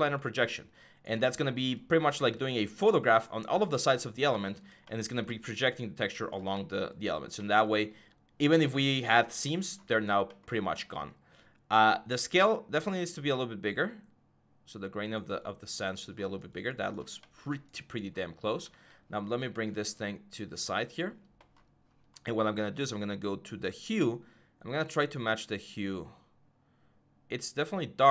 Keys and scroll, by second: 18.5 alt+Tab, 19.3 alt+Tab.